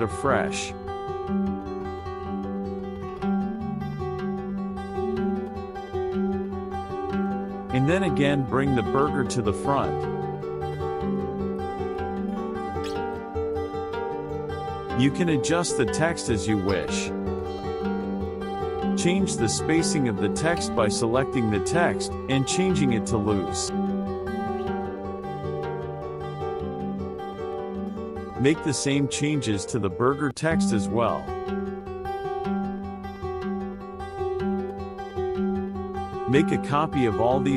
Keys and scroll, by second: 0.6-1.4 typing, 8.6 KP_Add, 10.9 KP_Subtract, 25.8 KP_Subtract, 32.7 KP_Subtract.